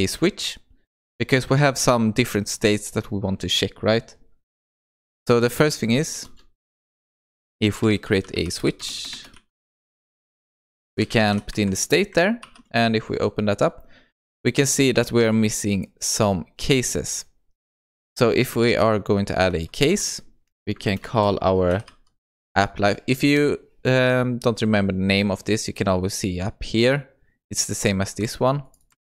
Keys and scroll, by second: 28.1 ctrl+c, 29.0 ctrl+v.